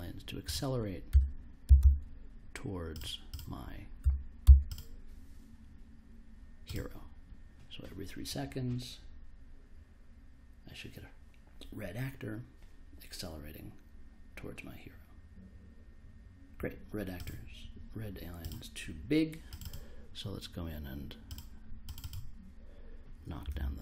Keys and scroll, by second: 1.1-2.2 typing, 4.0 1, 4.4 0, 23.1-23.8 typing.